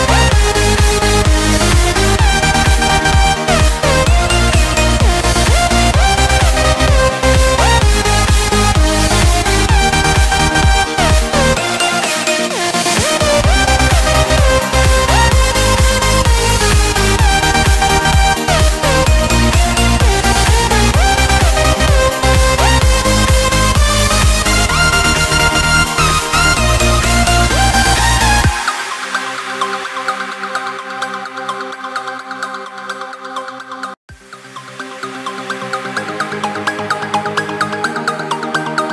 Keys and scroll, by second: 0.9 ctrl+space, 1.6 ctrl+alt+3, 3.4 ctrl+space, 5.2 ctrl+shift+], 5.6 space, 6.9 ctrl+shift+1, 7.2 ctrl+space, 10.9 ctrl+z, 11.3 ctrl+space, 14.3 ctrl+space, 15.6 ctrl+0, 16.7 ctrl+space, 24.6 ctrl+space, 26.9 ctrl+z, 27.6 ctrl+a, 30.5 ctrl+z, 30.8 ctrl+space, 31.7 ctrl+a, 33.8 ctrl+a, 36.3 ctrl+space, 38.6 ctrl+space.